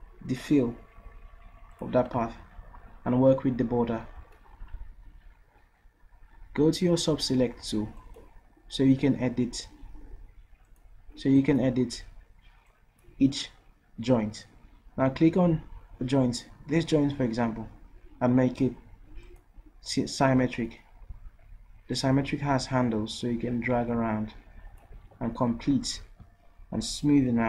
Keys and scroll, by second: 9.2 d.